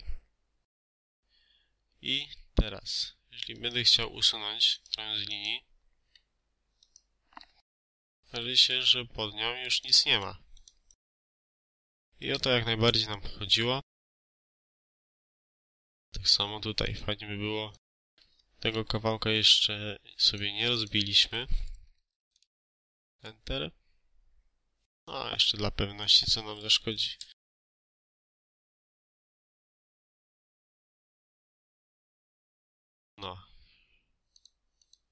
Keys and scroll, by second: 5.9 Escape, 7.8 Delete, 11.5 Delete, 12.0 ctrl+z, 18.7 Escape, 21.7-22.2 typing, 22.5 Return, 26.7-28.2 typing, 28.5 Return, 32.6 Escape.